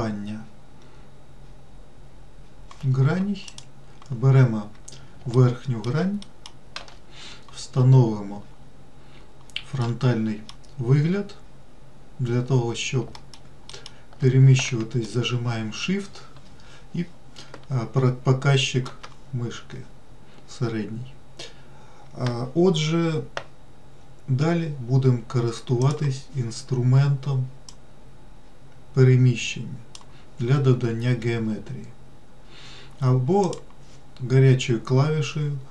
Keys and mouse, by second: 3.8 click, 5.8 alt+middle click, 6.6 alt+middle click, 10.1 middle click, 13.5 alt+middle click, 14.1 alt+middle click, 15.5-19.2 shift+middle drag, 26.1 click, 28.0-30.3 drag, 33.9 click.